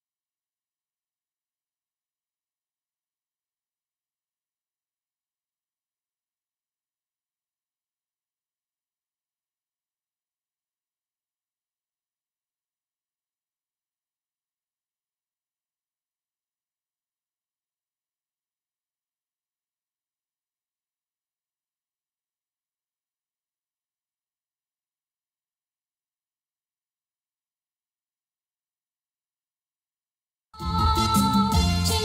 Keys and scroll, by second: 1.4 Escape, 3.1 Tab, 6.9 Tab, 14.7 space, 18.1 ctrl+s, 21.6 Tab, 25.2 Tab, 28.9 Tab, 30.5 ctrl+space.